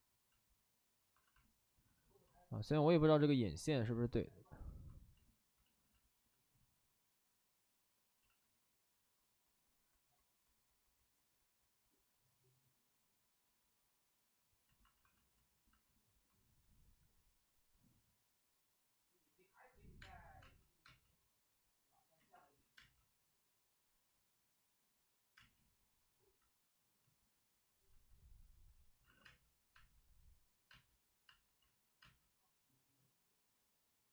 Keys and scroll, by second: 1.1 alt+s, 1.2 alt+s, 5.5 ctrl+z, 8.2 ctrl+z, 14.9 alt+s, 20.0 space, 20.4 space, 20.8 space, 22.1 ctrl+z, 22.3 ctrl+z, 22.7 space, 25.3 space, 26.7 ctrl+z, 29.0 alt+s, 29.2-31.9 typing, 31.6 ctrl+z.